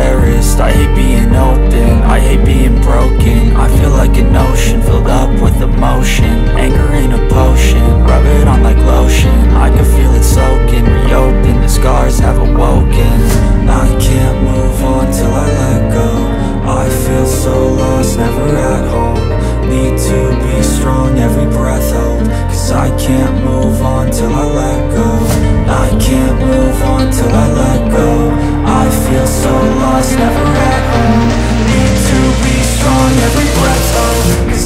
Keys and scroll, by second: 4.6 F2, 8.1 space, 8.8 End, 14.5 F4, 17.1 ctrl+g, 20.7 ctrl+g, 23.8 F2, 27.5 F4, 28.4 Escape, 34.4 BackSpace.